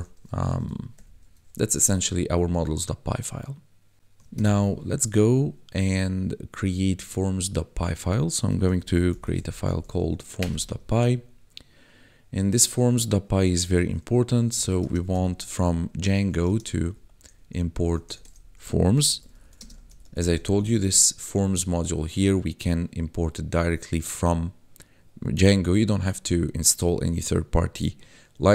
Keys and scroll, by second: 0.9 ctrl+Home, 1.2 ctrl+s, 4.3 ctrl+b, 8.6-9.6 typing, 10.3 Return, 14.3-15.2 typing, 16.1 Tab, 16.4-17.8 typing, 18.9-20.3 typing, 20.9 ctrl+s.